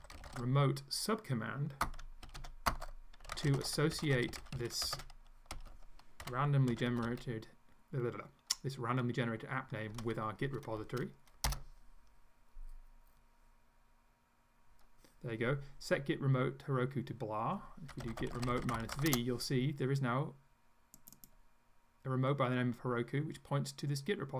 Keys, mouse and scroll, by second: 0.0-7.5 typing, 9.9 1, 11.5 Return, 17.7-19.4 typing, 21.0 click.